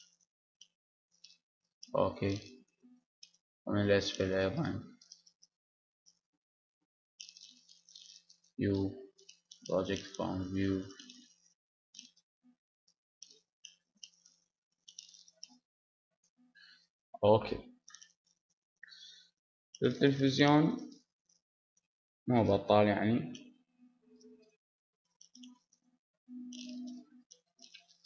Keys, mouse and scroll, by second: 1.1 Tab, 2.1 KP_7, 2.9 ctrl+KP_7, 4.6-9.2 drag, 5.9 b, 9.2 u, 10.4 s, 11.7-13.2 drag, 11.7 h, 13.2 ctrl+z, 14.2 g, 17.8 Tab, 17.8 click, 18.4-20.1 middle drag, 20.9-22.1 middle drag, 22.2-24.0 middle drag, 24.0 click, 24.6-26.8 middle drag, 25.2 a, 26.8-28.0 right drag, 27.7-28.0 drag.